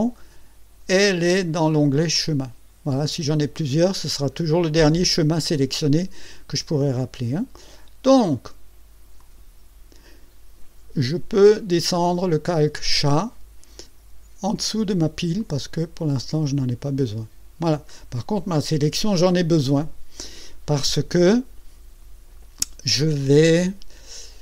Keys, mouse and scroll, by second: 2.1 click, 9.2 click, 15.4 click, 16.0 click.